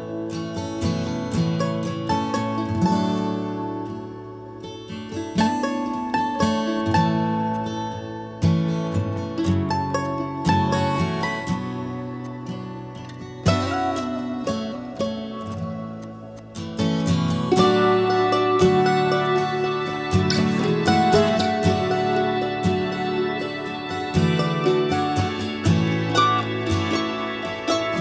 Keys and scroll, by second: 1.6 typing.